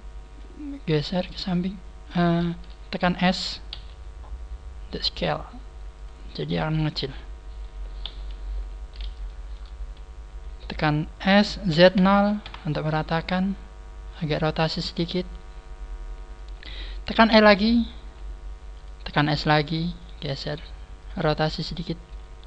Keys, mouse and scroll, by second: 1.0 click, 2.5 ctrl+z, 3.6 s, 6.1 click, 6.1 middle click, 7.7 middle click, 7.9 KP_3, 8.7 scroll down 1, 9.2 shift+middle click, 9.7-10.3 scroll up 3, 11.1 KP_3, 11.2 s, 14.7 r, 16.3 click, 17.3 e, 18.7 click, 19.0 s, 20.0 click, 20.0 g, 21.0 click, 21.1 r, 22.1 click, 22.3 g.